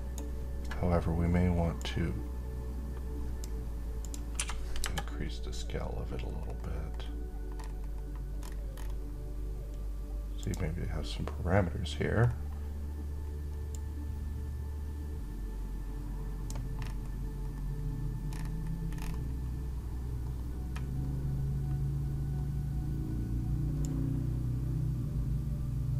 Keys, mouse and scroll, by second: 1.8-3.4 click, 4.0 1, 6.1-8.4 scroll down 2, 8.4-10.1 scroll up 2, 10.1 click, 11.9-13.4 scroll down 2, 13.4-16.2 drag, 16.5-18.5 scroll down 1, 21.6-23.5 scroll up 1, 23.5-25.9 drag.